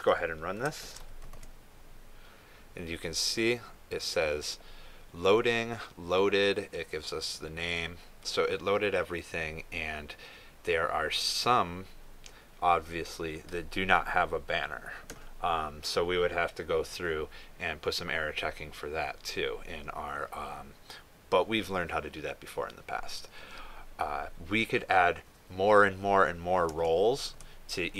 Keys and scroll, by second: 1.7 ctrl+s, 2.3 ctrl+r.